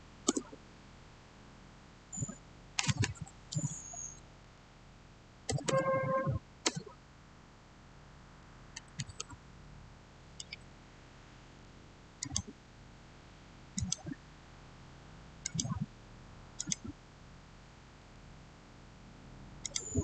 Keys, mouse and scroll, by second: 0.2 Return, 5.1-6.5 typing, 11.8-12.6 typing, 18.4 click, 19.5 click.